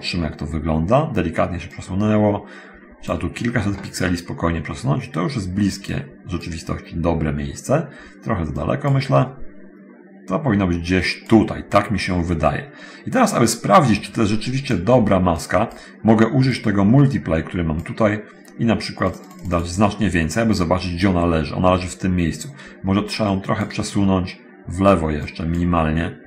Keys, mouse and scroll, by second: 1.9-3.4 drag, 5.8 click, 8.7 click, 11.3 click, 14.4 click, 15.6 click, 16.5-17.9 drag, 19.3 click, 23.5 click, 25.3 click.